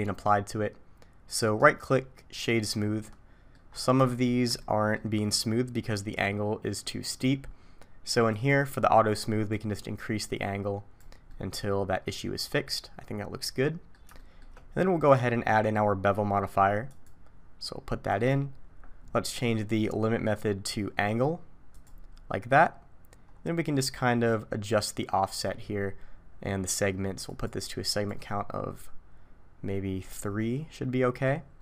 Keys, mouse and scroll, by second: 1.6 right click, 2.8 middle click, 3.7-4.1 scroll up 2, 4.1 shift+middle click, 4.6 middle click, 8.3 click, 9.6 click, 11.3 middle click, 14.2 shift+middle click, 15.1 click, 16.9 click, 19.3-19.9 scroll down 1, 19.9-20.6 scroll down 3, 21.7 click, 23.3-24.7 scroll up 1, 24.7-26.0 scroll up 2, 27.3 click, 27.9 click, 30.2 middle click.